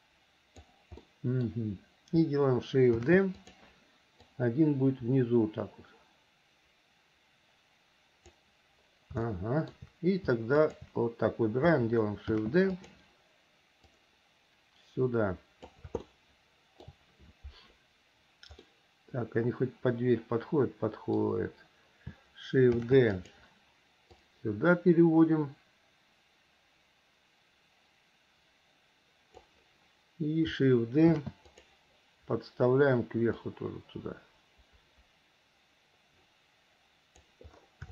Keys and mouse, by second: 1.2 middle click, 3.1 shift+d, 4.5-8.5 drag, 9.4 shift+middle click, 10.8 shift+click, 12.4 shift+d, 14.2-15.9 drag, 16.2 shift+middle click, 18.9-21.4 middle drag, 22.9 shift+d, 24.3-29.6 drag, 31.3 shift+d, 33.7-37.4 drag.